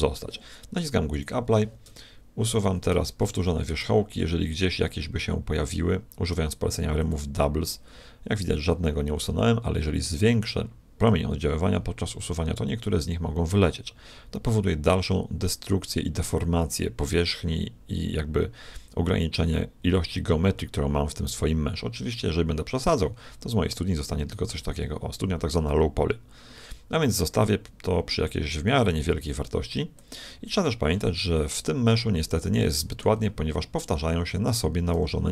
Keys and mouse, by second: 1.1-2.8 drag, 1.8 Tab, 2.7 a, 2.9 a, 3.4 a, 3.8 w, 9.3 t, 11.0-12.8 drag, 30.9-33.8 middle drag, 34.5-35.3 right drag, 35.0 g.